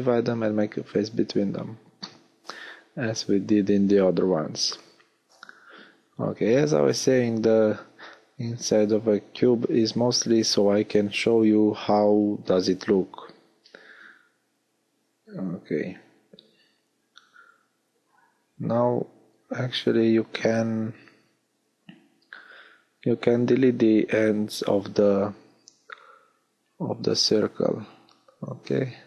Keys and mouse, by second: 2.0 middle click, 2.2-3.3 middle drag, 5.3-6.3 middle drag, 8.8-10.4 right drag, 10.4 g, 12.9 x, 13.6 middle click, 19.6-21.2 drag, 21.2 f, 25.1 click, 25.9 x.